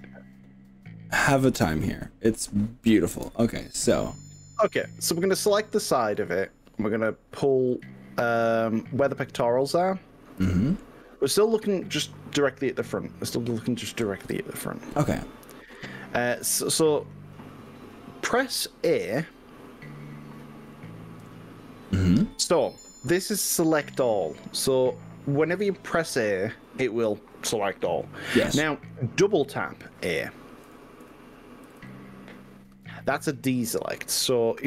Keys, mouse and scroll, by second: 1.8 middle click, 3.1 KP_1, 4.1 scroll up 1, 4.9-6.1 shift+middle drag, 7.7-10.9 middle drag, 11.5-13.7 middle drag, 14.3 KP_1, 21.2 a, 30.7 a, 31.1 a, 31.7 a, 31.9 a.